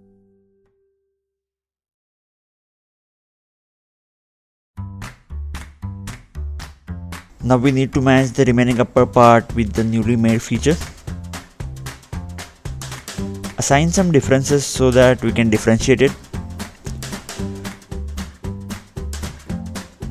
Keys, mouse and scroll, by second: 1.8 click, 2.8 ctrl+Tab, 5.8 click, 6.3-7.4 scroll up 1, 7.4 scroll up 1, 7.5 middle click, 9.0-9.3 scroll down 2, 10.3 scroll down 1, 10.9 ctrl+Tab, 12.3 click, 12.7 middle click, 13.4-13.8 scroll down 2, 15.0 middle click, 16.0-16.4 scroll down 2, 19.7 scroll up 1, 19.9 ctrl+8.